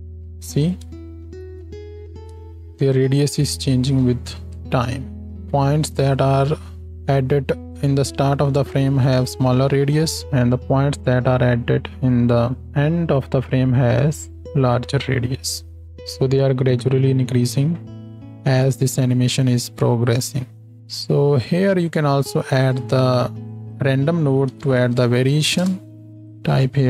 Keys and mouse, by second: 0.6 space, 4.7-5.5 space, 7.5 space, 14.5 space, 15.8 space, 16.2-19.3 drag, 16.2-26.8 middle drag, 16.2-19.3 right drag, 16.2 space, 20.6 space, 22.4-26.8 drag, 22.4-26.8 right drag.